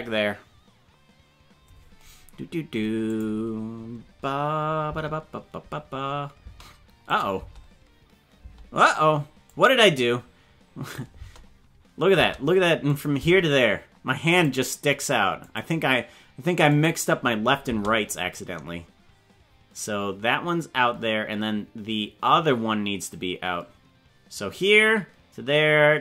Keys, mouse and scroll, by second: 3.1 click, 4.9 space, 6.4 space, 7.0 click, 7.3 space, 8.4 space, 9.4-10.9 drag, 11.1 space, 12.1 space, 12.8 click, 13.1 space, 14.3 click, 15.5 click, 16.7 click, 17.6 space, 18.1-26.0 drag.